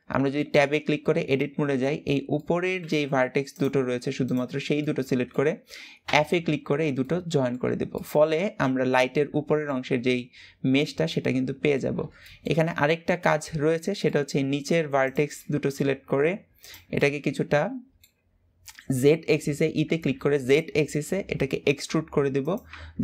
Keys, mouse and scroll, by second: 1.7-2.1 scroll up 2, 2.1-3.2 middle drag, 3.2 click, 3.9 shift+click, 4.5-5.7 middle drag, 5.7 f, 6.3-6.7 scroll down 3, 6.7 middle click, 7.3 Tab, 7.7-13.0 middle drag, 13.0 Tab, 13.2-13.7 scroll up 3, 13.7 shift+middle click, 14.2-14.7 scroll up 1, 14.7 click, 15.0-16.3 middle drag, 16.3 shift+click, 16.7-19.2 middle drag, 19.2 e, 22.4 Tab.